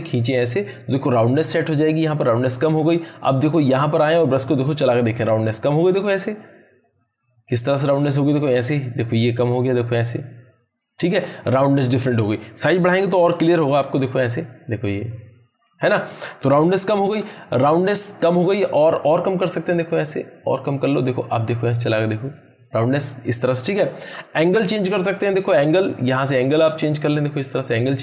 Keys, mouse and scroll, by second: 13.1-14.0 typing, 14.2-15.7 drag, 16.7 ctrl+z, 18.5-20.8 drag, 23.9 ctrl+z, 25.3-27.9 drag.